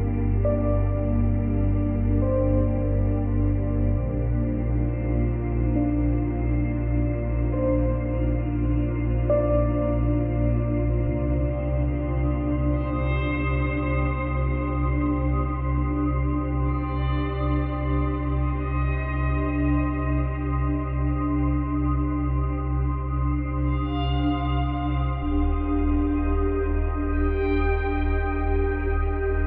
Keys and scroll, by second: 1.4 space, 2.9 space, 7.0 space, 8.0 space, 9.9 space, 25.1 Delete.